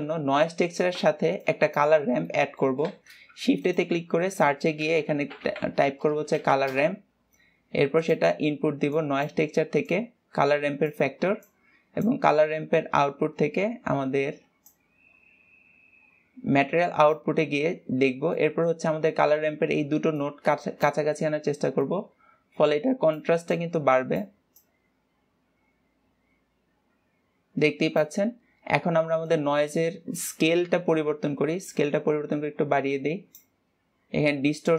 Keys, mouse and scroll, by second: 10.1-11.8 drag, 15.0-18.1 drag, 18.1-18.7 scroll up 3, 18.7 middle click, 19.3-20.5 scroll up 1, 20.5-27.9 drag, 29.1-29.6 scroll up 1, 29.6 click.